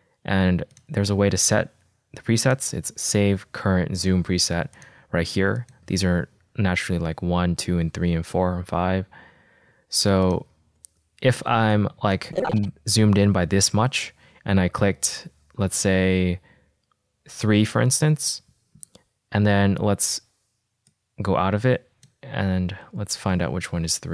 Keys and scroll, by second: 18.0 3, 23.8 alt+k.